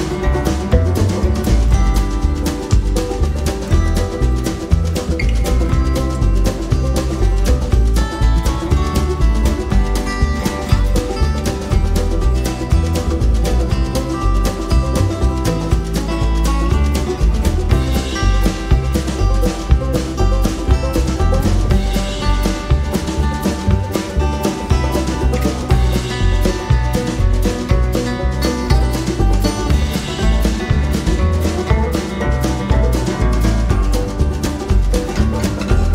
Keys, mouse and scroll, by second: 1.2 ctrl+KP_Add, 2.6 click, 3.8 ctrl+d, 4.8 shift+click, 6.7 ctrl+KP_Multiply, 11.4 F7, 13.0 click, 14.5-16.9 drag, 17.3 F1, 17.9 click, 19.0 KP_Subtract, 23.0-24.3 drag, 28.6 ctrl+g, 30.2 click, 31.1 KP_Add, 32.3 KP_Add.